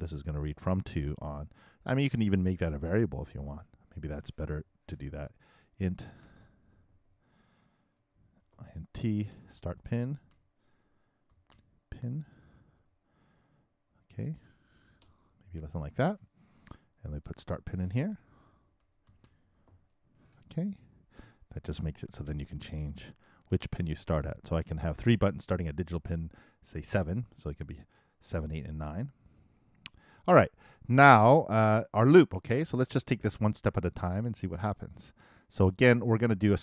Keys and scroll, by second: 4.6 shift+Return, 5.7-6.7 typing, 8.4 shift+i.